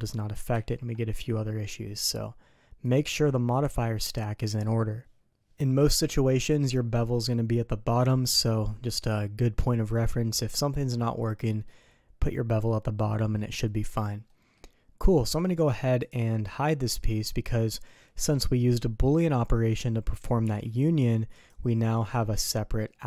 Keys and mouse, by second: 0.5 ctrl+z, 1.2 click, 2.9 click, 3.5 click, 11.4 middle click, 14.3 middle click, 15.2 middle click, 16.0 click, 17.0 middle drag, 20.4 g, 22.2 middle click, 22.6 drag.